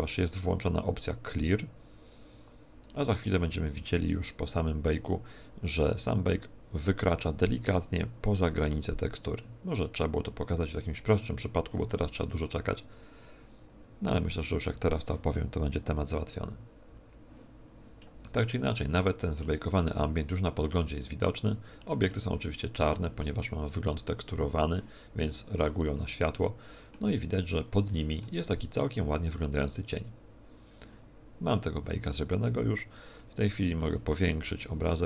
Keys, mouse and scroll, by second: 18.0 middle click, 19.7 middle click, 22.6 middle click, 23.8 click, 26.4 middle click, 27.0-27.8 scroll up 5, 27.8 shift+middle click, 33.0 scroll up 5, 33.7 shift+middle click, 34.6 shift+middle click.